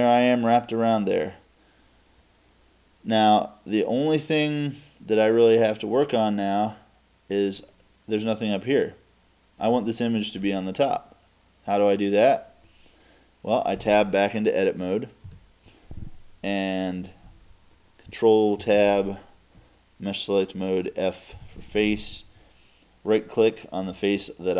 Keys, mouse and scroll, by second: 0.0 click, 0.2 click, 0.4-0.8 drag, 7.8-9.9 drag, 10.4-11.4 drag, 15.3 Tab, 23.1-24.5 right drag.